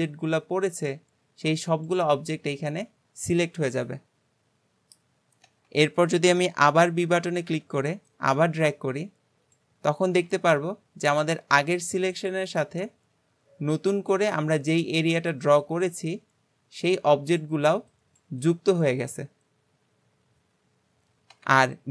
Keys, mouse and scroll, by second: 6.6-7.1 scroll up 1, 7.1-7.5 scroll down 1, 7.5 b.